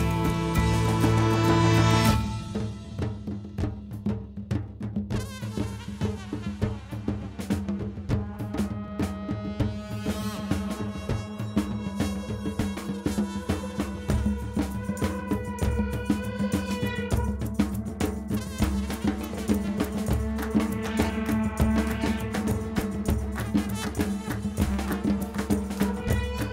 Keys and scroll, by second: 21.7 super+=.